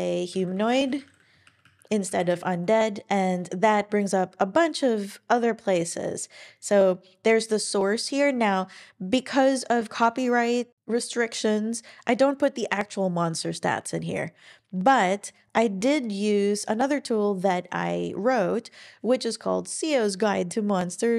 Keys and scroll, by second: 0.1-1.4 typing, 4.1 typing.